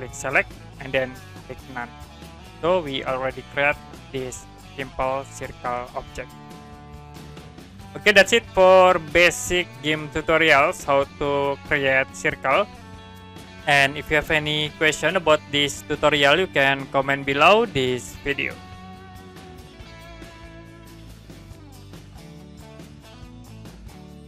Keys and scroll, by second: 19.0 Print.